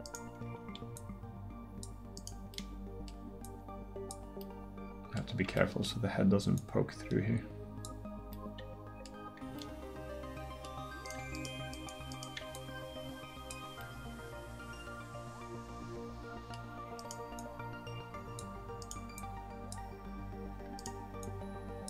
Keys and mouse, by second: 6.6-7.9 middle drag, 7.9 click, 13.8 middle click, 17.4-21.8 right drag.